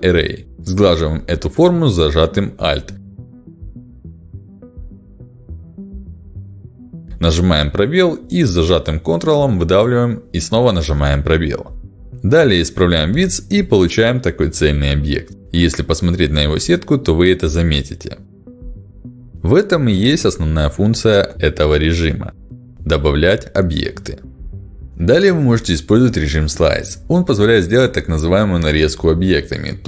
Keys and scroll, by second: 0.8 a, 6.8 space, 11.1 space, 12.9 ctrl+alt+x, 27.1 ctrl+alt+x.